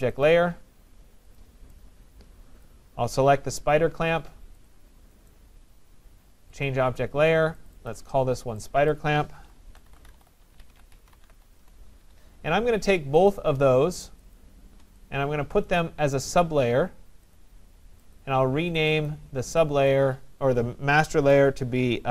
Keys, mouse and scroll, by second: 0.2-0.9 typing, 0.3 click, 1.4 right click, 2.7 click, 4.8 click, 5.3 right click, 6.7 click, 7.9 click, 8.9 click, 9.2-11.8 typing, 13.3 click, 14.4 shift+click, 15.8-16.5 typing, 16.2 click, 17.4 click, 18.2 click, 18.2 shift+click, 19.0 click, 19.1 click, 19.2 shift+click, 19.9 click.